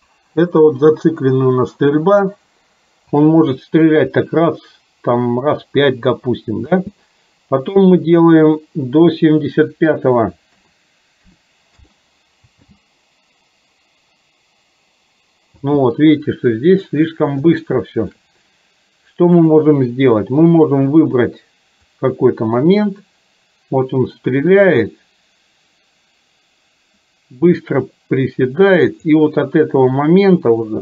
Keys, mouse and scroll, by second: 6.7 space, 9.7-11.9 drag, 12.7 space, 17.7 shift+middle click, 19.4 click, 22.1-29.2 drag, 30.1-30.8 drag.